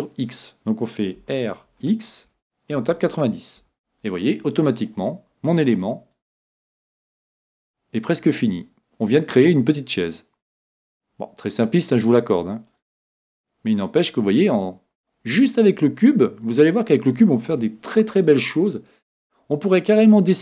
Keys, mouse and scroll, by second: 1.2 r, 4.9-6.7 middle drag, 6.7-10.3 drag, 11.8-13.5 drag, 13.1-17.0 middle drag, 19.6 middle click.